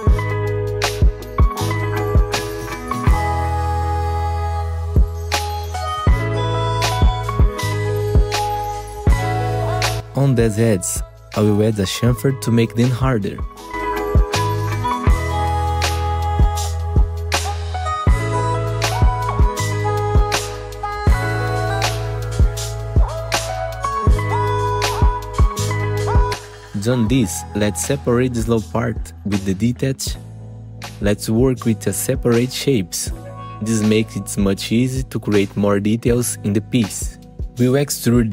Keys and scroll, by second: 4.2 2, 4.3 F4, 5.8 F4, 6.7 F4, 7.7 F4, 8.2 2, 11.4 F4, 12.6 F4, 14.4 ctrl+z, 15.3 F3, 16.8 F3, 19.0 ctrl+shift+c, 23.1 2, 23.2 F4, 26.4 F4, 29.1 F3, 31.5 F3, 37.2 3.